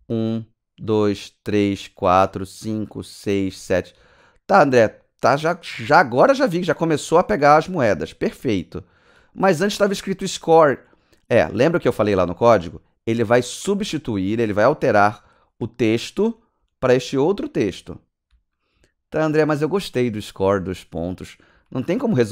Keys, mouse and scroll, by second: 1.9-4.8 typing, 6.5-22.3 typing.